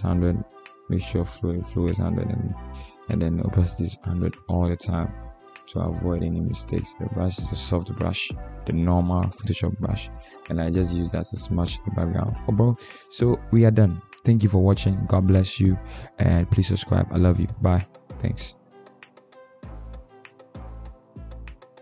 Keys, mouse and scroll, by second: 11.5-12.0 ctrl+alt+scroll up 1, 12.0 ctrl+alt+scroll up 1, 13.9 ctrl+s.